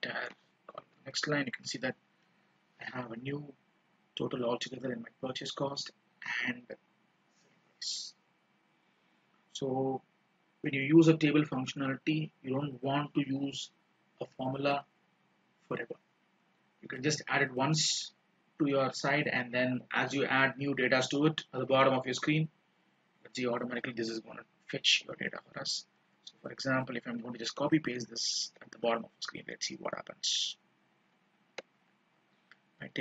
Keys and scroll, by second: 0.1 ctrl+shift+Down, 1.0 ctrl+d, 28.2 ctrl+c, 31.7 ctrl+v.